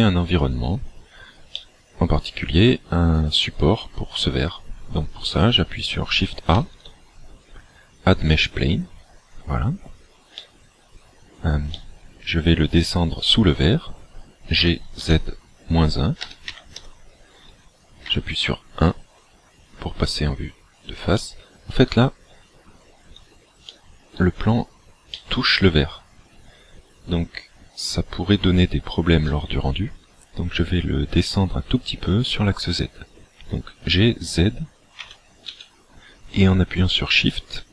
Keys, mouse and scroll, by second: 0.9-1.3 scroll down 3, 1.6 middle click, 4.2-5.3 scroll up 4, 6.6 shift+a, 10.4 middle click, 11.7 middle click, 14.7 g, 18.0 KP_1, 21.1 middle click, 23.7 shift+middle click, 24.5-25.2 scroll up 4, 25.2 middle click, 29.3 middle click, 35.1 g.